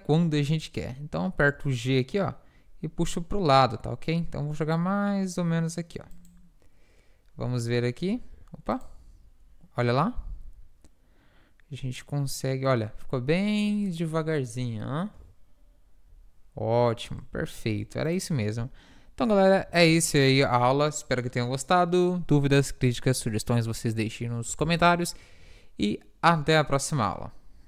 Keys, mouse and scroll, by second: 0.8 middle click, 1.5 g, 8.8 alt+a, 8.8-11.2 drag, 17.7 ctrl+s, 19.8 a, 24.7 ctrl+s.